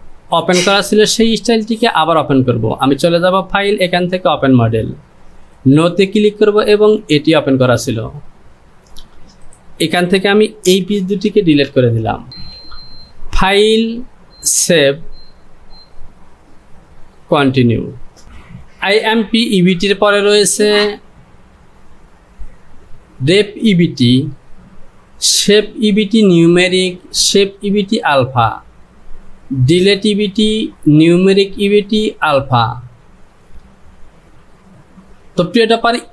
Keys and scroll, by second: 10.7 shift+z, 12.3 j.